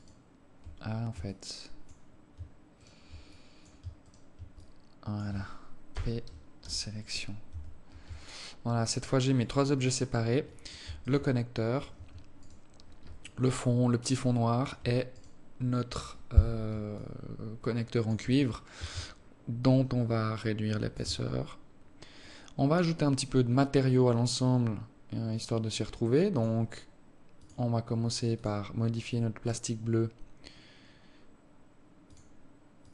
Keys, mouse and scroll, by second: 0.1 alt+right click, 1.4 alt+click, 3.0 alt+shift+right click, 3.5 alt+click, 4.2 alt+shift+right click, 4.8 alt+click, 6.1 p, 7.7 Tab, 8.3 right click, 9.1 right click, 9.7 right click, 9.9 right click, 11.2 right click, 12.6 right click, 13.4 alt+click, 15.4 right click, 17.1 alt+click, 19.8 shift+click, 22.4 right click, 23.6 scroll up 2, 24.2 scroll up 2, 24.6-25.0 scroll down 3, 25.0 scroll up 1, 25.4 scroll down 2, 26.5 click, 27.6 click, 32.2 click.